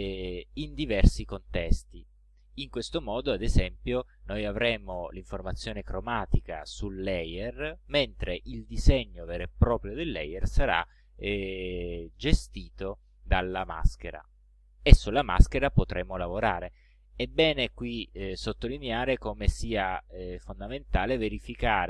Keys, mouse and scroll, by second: 3.0 click, 3.7 ctrl+scroll up 2, 20.8 click, 21.6 click.